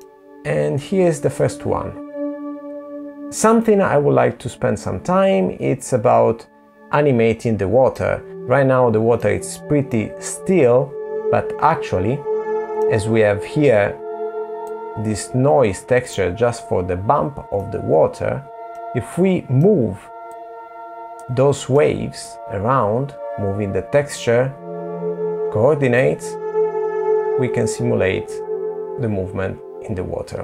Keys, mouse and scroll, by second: 3.1 middle click, 7.9 middle click, 10.5 middle click, 12.5-13.5 scroll up 2, 13.5 scroll up 1, 13.5 click, 16.1 middle click, 17.6 middle click, 18.9 click, 20.3 middle click, 24.4 click.